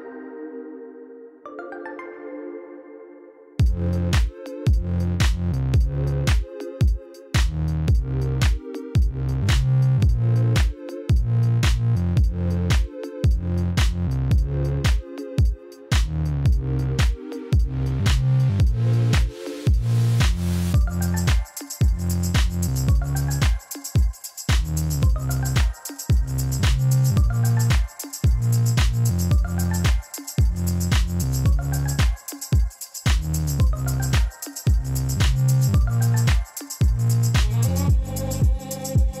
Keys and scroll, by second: 1.9 5, 2.0 Return, 6.1 alt+a, 21.6 Tab, 21.8 a, 24.4 s, 24.6 1, 24.8 ., 25.0 2, 25.5 Return, 25.7 Tab, 26.4 a, 27.1 1, 27.2 ., 27.3 2, 27.5 Return, 27.6 Tab, 28.8 Tab, 29.1 a, 29.4 1, 29.5 ., 29.6 2, 29.7 Return, 30.0 Tab, 30.3 alt+a.